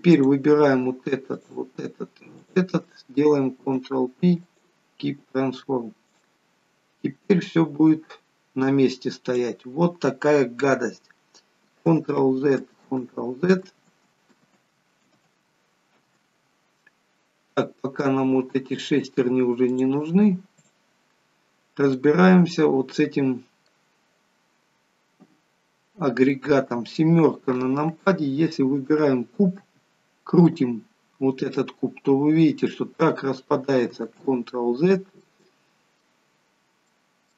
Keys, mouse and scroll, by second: 0.2 click, 1.4 shift+click, 3.7 ctrl+p, 6.2 click, 7.5 click, 12.2 ctrl+z, 13.0 ctrl+z, 14.7 ctrl+z, 15.4 ctrl+z, 18.5-19.2 scroll down 2, 19.2 scroll down 2, 19.8 click, 19.8 scroll down 1, 20.7 click, 21.7 scroll down 2, 22.0 middle click, 26.7 KP_7, 29.8 r, 34.3 ctrl+z, 35.3 middle click, 36.5-36.9 scroll up 5, 37.0 middle click.